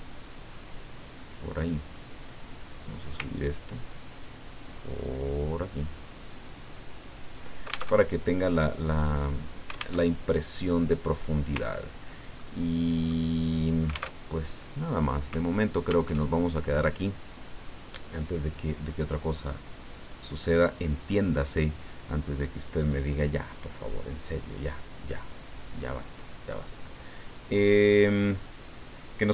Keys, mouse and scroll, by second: 1.8 click, 3.2-7.5 ctrl+drag, 8.0 ctrl+alt+Tab, 10.0 alt+Tab, 11.7 ctrl+scroll down 2, 12.4-13.4 ctrl+middle drag, 14.1 alt+Tab, 16.1 alt+Tab, 20.0 click, 22.3 click, 24.3 click, 25.5 click, 26.4 click, 27.1 click, 28.1 click.